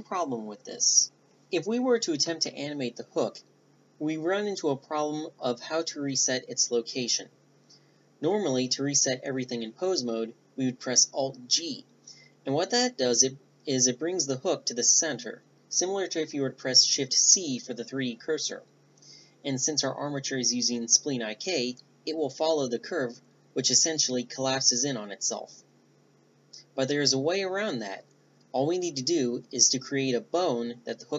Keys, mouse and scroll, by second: 6.0 drag, 6.6 middle click, 10.8 alt+g, 14.0 click, 14.2-18.8 middle drag, 19.8 ctrl+z, 22.2 ctrl+z.